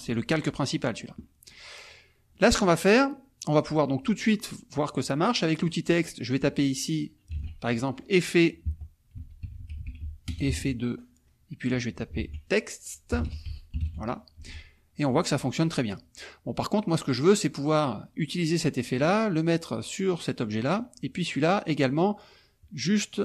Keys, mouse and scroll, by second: 0.1 click, 1.2 click, 1.7-2.3 scroll up 1, 2.3 click, 2.7-5.5 scroll up 1, 5.5 click, 6.4 click, 7.3 ctrl+a, 8.6 Caps_Lock, 8.9-10.4 typing, 11.6 click, 12.1 ctrl+a, 12.9-14.3 typing, 14.3 F1, 14.8 click, 15.5 click, 16.8 click.